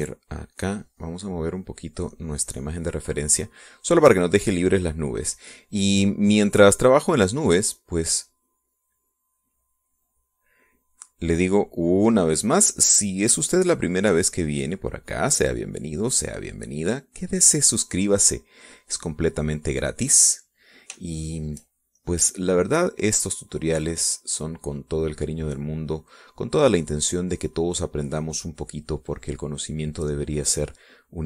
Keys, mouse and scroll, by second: 2.1 click, 3.0 click, 3.7-5.6 drag, 6.7 click, 8.8 click, 10.6-11.7 drag, 16.4-18.0 drag, 18.7 click, 21.3 click, 22.5 shift+click, 23.5-31.2 shift+drag.